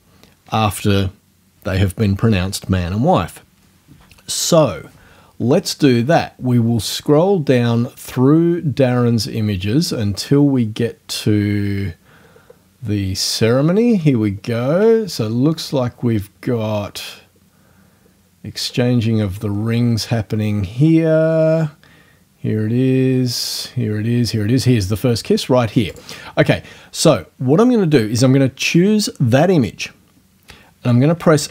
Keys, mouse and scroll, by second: 6.5-6.9 scroll down 1, 7.1-7.4 scroll down 1, 8.6-8.9 scroll down 1, 9.8-10.1 scroll down 1, 11.6-12.1 scroll down 2, 12.2-12.5 scroll down 2, 14.1 scroll down 2, 15.5-16.2 ctrl+scroll up 2, 18.7 ctrl+scroll up 2, 19.5 ctrl+scroll up 2, 25.9 click, 31.4 F1.